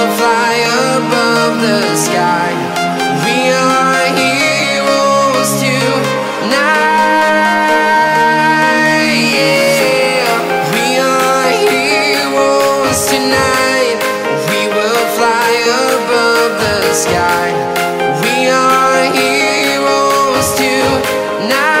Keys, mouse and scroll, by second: 0.0 scroll up 1, 0.3-2.2 drag, 2.2-3.6 shift+drag, 4.6 scroll up 1, 5.5 click, 6.8 click, 8.1 click, 11.2 right click, 12.5 click, 14.8 scroll down 1, 15.1 right click, 17.8 scroll down 1, 18.2 right click, 19.2-19.6 scroll up 1, 20.0 click, 20.3 scroll up 1, 21.1 right click, 21.4-21.8 scroll.